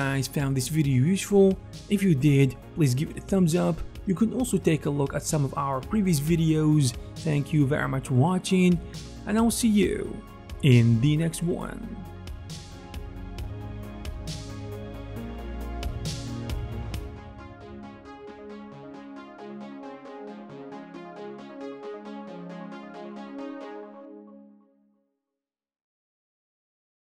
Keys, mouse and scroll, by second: 2.2 alt+middle click, 2.8 ctrl+alt+click, 3.3 alt+f, 3.3 alt+middle click, 3.6-6.4 ctrl+alt+drag, 4.9 f, 5.5 f.